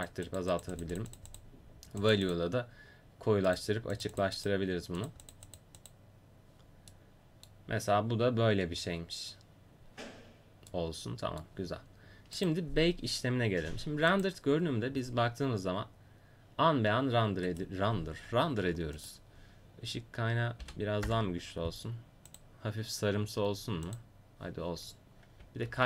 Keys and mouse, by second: 9.4-10.9 middle drag, 19.0-21.0 drag, 19.0-21.0 right drag, 22.7-23.9 drag.